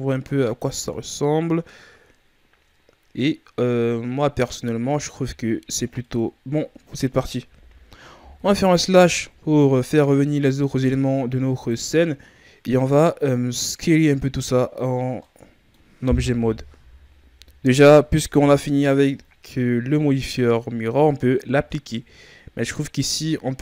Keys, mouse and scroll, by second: 0.0-2.7 shift+scroll up 6, 2.7-4.3 scroll up 1, 4.9 scroll down 3, 5.2-7.4 middle drag, 7.4 KP_1, 8.2 KP_Divide, 9.6-10.8 ctrl+scroll up 1, 10.8-11.5 scroll up 3, 11.5 right click, 14.5-15.0 scroll down 3, 15.2-16.2 middle drag, 16.2 KP_3, 19.5-20.8 scroll down 4, 20.8-21.9 scroll up 4, 21.9 Tab, 22.8 right click.